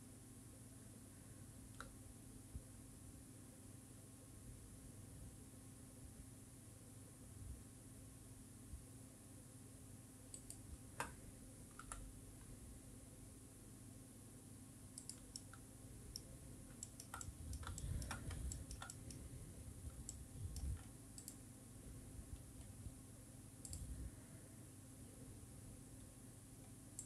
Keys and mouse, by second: 10.7 shift+click, 12.2 g, 15.3 click, 15.6 middle click, 17.1 shift+middle click, 17.5 middle click, 18.1 shift+middle click, 19.2 middle click, 20.8 shift+middle click.